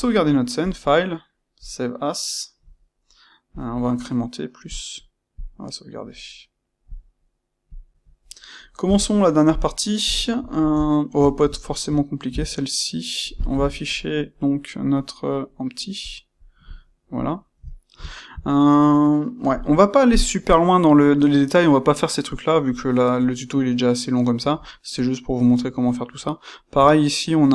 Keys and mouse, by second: 0.5-2.1 drag, 5.4-6.4 drag, 6.4-15.9 middle drag, 8.8 n, 10.0 KP_1, 15.9 click, 17.2-27.5 shift+middle drag.